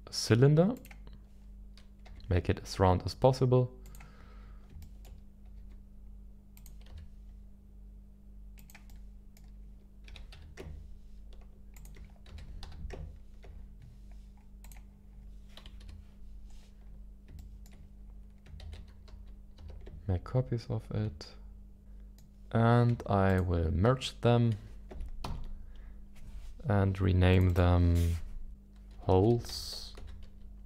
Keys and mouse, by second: 2.0 g, 3.8 click, 4.8 shift+middle click, 5.5 g, 6.5-8.7 drag, 8.5 s, 8.8 middle click, 10.3 g, 10.3 z, 11.7 ctrl+click, 12.6 z, 12.6 s, 14.6 click, 15.6 KP_1, 15.8 KP_7, 17.6 shift+middle click, 18.6 shift+d, 19.1 y, 19.6 x, 19.9 x, 21.8 middle click, 21.8 g, 21.8 y, 23.3 shift+click, 25.2 ctrl+j, 27.3 click, 27.6-30.6 drag.